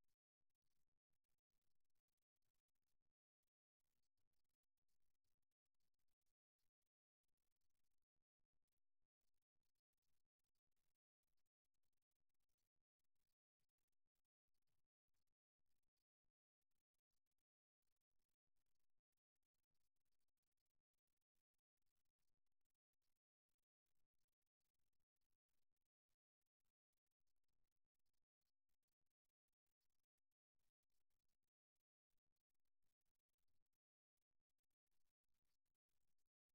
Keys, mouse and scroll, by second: 0.7 e, 4.6-6.6 middle drag, 8.6 KP_1, 10.5-12.4 middle drag, 12.4-15.1 right drag, 14.8 f, 16.2 right click, 19.0-20.2 right drag, 21.6-27.1 right drag, 28.1 e, 32.8-35.4 middle drag, 35.4 KP_3.